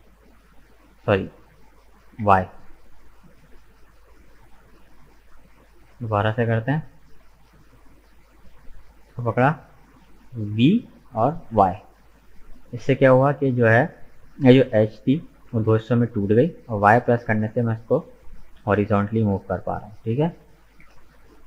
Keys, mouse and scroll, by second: 7.1 ctrl+z, 7.4 ctrl+z, 8.6 right click, 10.6 v, 20.7 middle click.